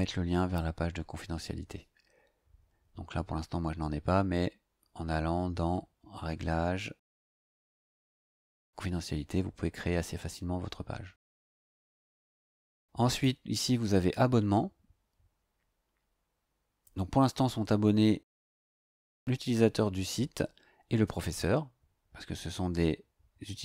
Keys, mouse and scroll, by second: 12.0 click, 13.1 click.